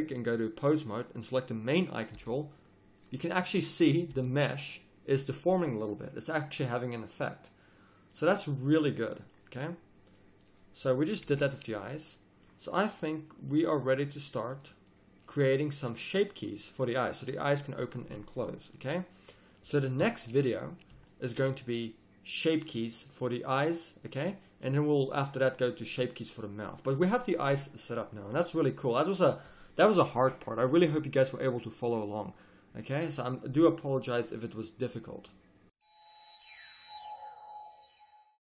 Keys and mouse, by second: 1.3 middle click, 2.2-3.7 drag, 2.2 g, 3.8 click, 4.2 g, 10.0-12.0 drag, 11.3 a, 20.0 KP_1.